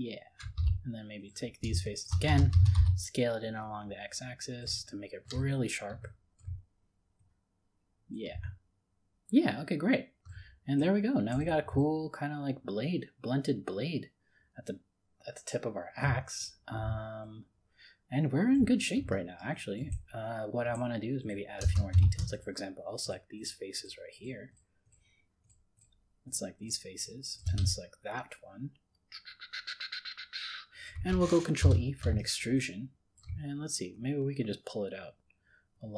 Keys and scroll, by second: 31.6 ctrl+e.